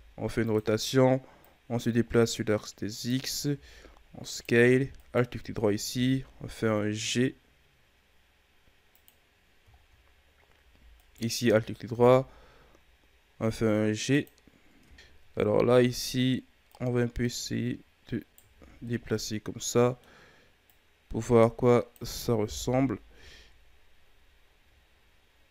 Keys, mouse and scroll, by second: 1.4-3.5 drag, 3.5 s, 5.0 alt+right click, 5.9 g, 9.2-9.8 scroll down 1, 9.8-10.9 scroll up 2, 10.9 alt+right click, 11.9 g, 15.0-15.8 shift+scroll up 7, 15.8 Tab, 16.7 right click, 18.5 ctrl+z, 18.6 scroll down 2, 18.8-20.2 middle drag, 20.2-20.6 scroll up 2, 20.6-22.4 drag, 22.4 KP_1, 23.1 Tab, 23.6-24.3 scroll down 3, 24.3-25.0 ctrl+scroll down 1, 25.0-25.5 scroll up 2.